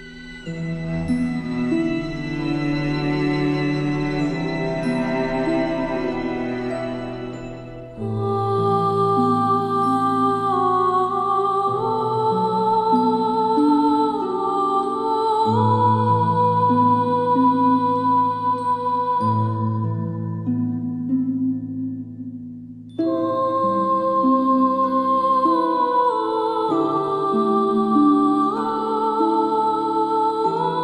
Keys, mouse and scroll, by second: 13.5-14.8 alt+scroll down 3, 14.8 space, 14.8-16.8 drag, 18.8 ctrl+shift+], 20.1 click, 24.6 alt+scroll up 1, 26.1 click.